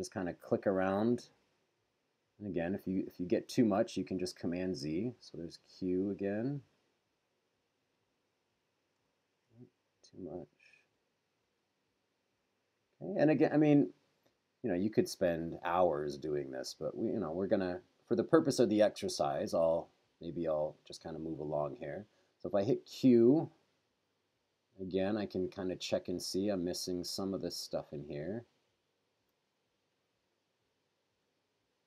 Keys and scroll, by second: 4.7 q, 9.3 super+z, 20.6 q, 26.3 q, 29.3 q.